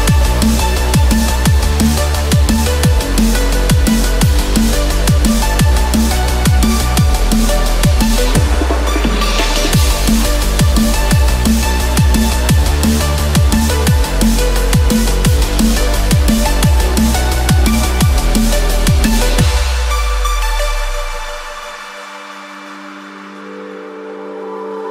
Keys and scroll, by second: 17.9 ctrl+-, 21.8 ctrl+=.